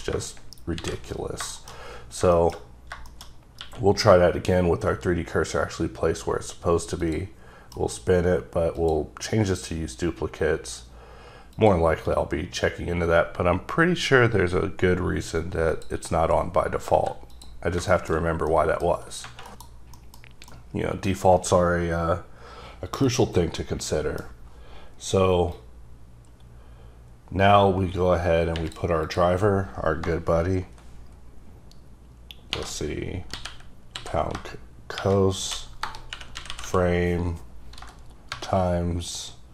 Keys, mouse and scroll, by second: 0.7 shift+c, 1.5 shift+middle click, 1.7-2.3 scroll up 3, 2.3 middle click, 2.5-2.9 scroll up 3, 3.1 shift+middle click, 3.6 q, 7.0 q, 7.1 click, 7.7 F9, 8.7 click, 11.5 click, 16.0 click, 16.9 x, 17.3 click, 17.9 shift+middle click, 18.1 scroll down 1, 18.5 middle click, 19.5 KP_Decimal, 19.9 middle click, 20.5 middle click, 23.0 middle click, 25.5-28.5 drag, 29.0 click, 32.5-36.6 typing, 38.0-39.5 typing.